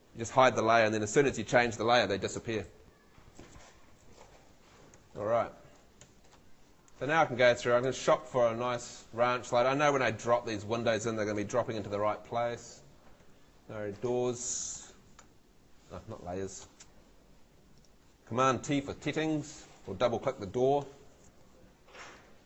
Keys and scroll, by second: 4.9 Escape, 6.1 F2, 13.0 Escape, 15.1 super+l, 18.7 super+t.